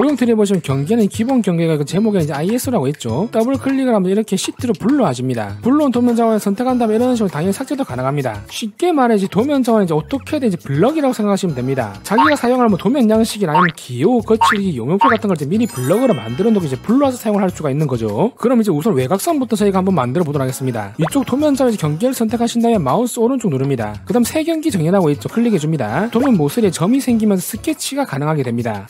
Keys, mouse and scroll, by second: 3.4 click, 3.5 click, 4.4 click, 4.6 click, 4.8 click, 5.6 ctrl+click, 6.7 ctrl+click, 7.2 right click, 8.1 click, 22.5 click, 23.6 right click, 25.9 click.